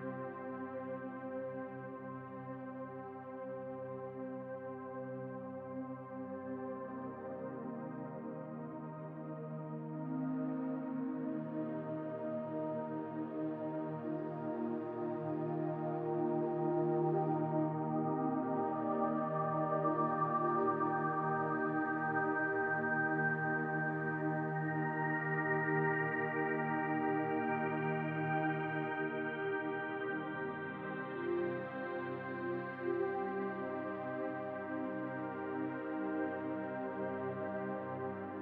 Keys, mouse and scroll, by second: 1.1-3.1 drag, 3.1-4.3 scroll up 1, 4.3 Tab, 9.8 click, 14.8 click, 17.4 g, 25.4 Delete, 31.6 click, 33.0 click, 34.2 alt+shift+click, 35.1 click, 38.3 e.